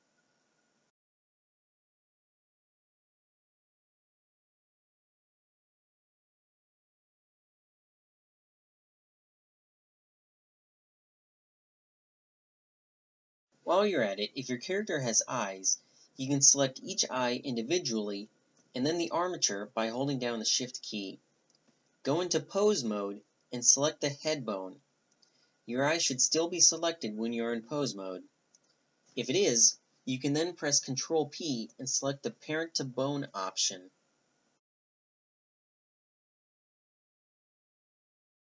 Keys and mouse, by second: 0.5 click, 0.9 ctrl+n, 1.7-3.4 drag, 3.1 ctrl+n, 4.1 ctrl+n, 4.4-5.5 middle drag, 5.5 a, 5.9 Tab, 6.8 middle click, 9.3-11.2 middle drag, 12.0-13.5 middle drag, 13.5 Tab, 14.1 Tab, 15.3-16.0 middle drag, 19.9-25.1 drag, 25.4 click, 26.0-26.5 right drag, 26.5-30.8 middle drag, 30.8 right click, 31.3 ctrl+p, 36.1 click, 36.9-37.7 right drag, 37.5 ctrl+p, 38.0 click, 38.1 a, 38.2 click, 38.3 h.